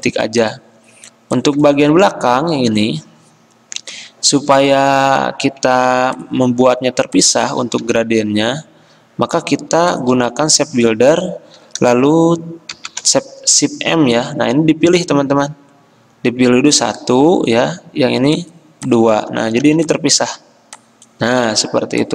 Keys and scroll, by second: 2.0 z, 5.2 ctrl+z, 6.0 v, 7.7 ctrl+z, 12.8 m, 19.7 v, 21.4 ctrl+z.